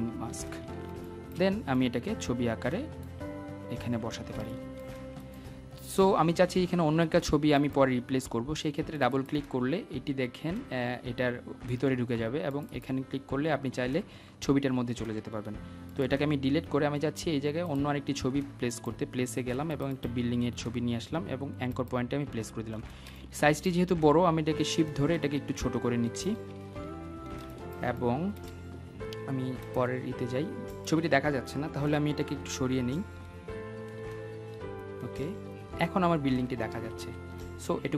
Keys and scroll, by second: 18.4 Delete, 34.5 shift+Left.